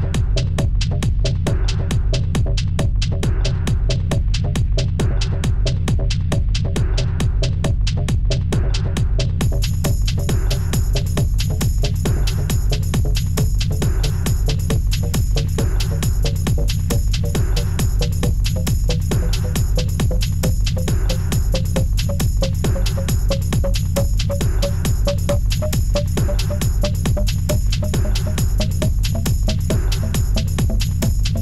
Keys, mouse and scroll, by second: 1.5 double click, 4.7-5.2 scroll down 1, 5.2 Return, 5.4 Return, 6.6 ctrl+shift+a, 9.8 Return, 9.9 Return, 11.3 ctrl+click, 11.4 ctrl+c, 13.2-14.9 alt+scroll down 40, 18.8 ctrl+shift+a, 21.5 Return, 23.2 double click, 25.1 g, 30.7 right click.